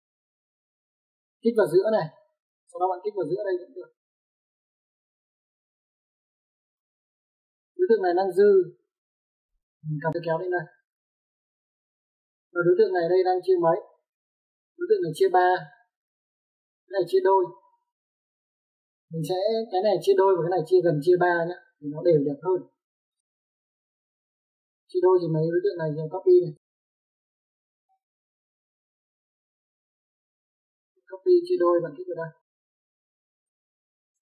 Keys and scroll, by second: 7.4 space, 12.3 Escape, 27.4 c, 27.8 o, 28.0 space.